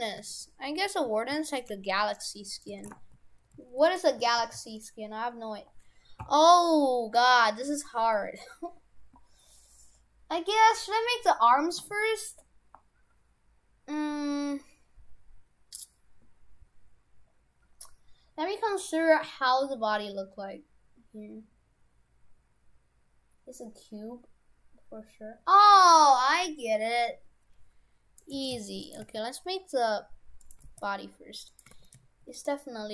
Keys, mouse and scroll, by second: 1.7 right click, 1.7 g, 2.5 right click, 2.7 shift+f, 4.3 shift+f, 7.2 middle click, 28.3 right click, 28.4 shift+f, 29.1 shift+a, 30.7 g, 31.8 shift+f.